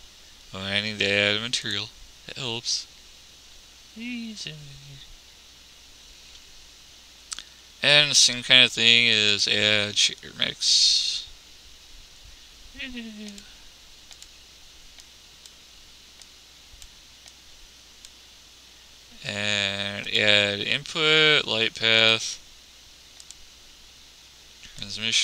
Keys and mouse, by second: 21.6-22.6 drag.